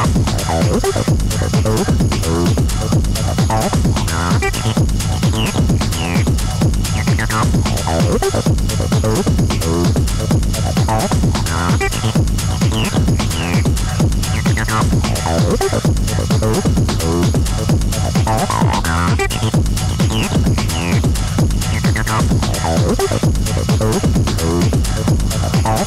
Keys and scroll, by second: 8.1 ctrl+F1, 10.9 ctrl+d, 11.1 Escape, 12.3 1, 12.5 Return, 14.4 ctrl+d, 14.6 Escape, 15.4 9, 15.6 Return.